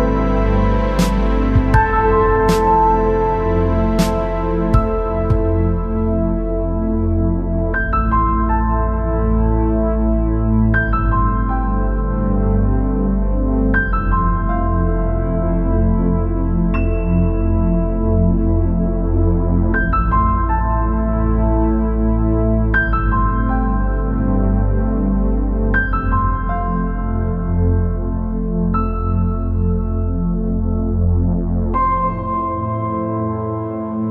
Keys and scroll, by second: 7.5-8.2 space, 13.4 ctrl+z, 13.9-14.4 space.